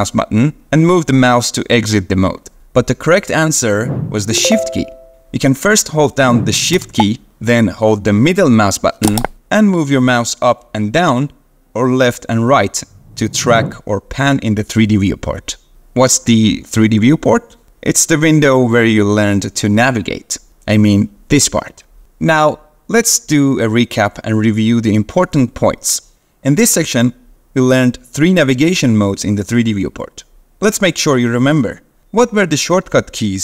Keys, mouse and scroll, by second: 9.2-13.6 shift+middle drag.